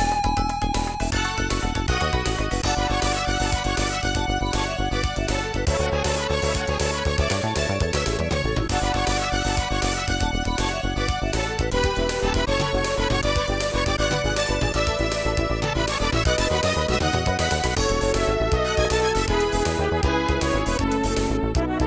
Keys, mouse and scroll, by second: 2.1 click, 2.2 click, 4.5 click, 5.1 click, 5.2 click, 9.0 click, 15.8 0, 17.6 click, 17.8 click, 18.2 click, 18.2 click, 19.2-20.5 typing, 21.3 Tab, 21.7 click.